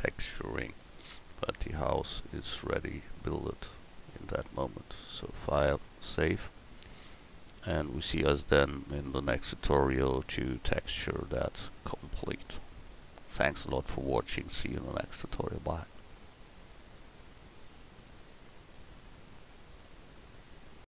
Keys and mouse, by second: 17.5 click, 17.9 middle click.